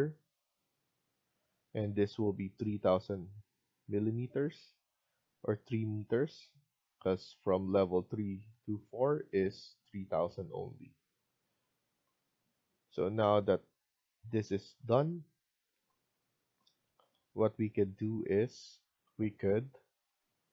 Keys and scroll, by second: 8.6 Escape, 9.2 Escape.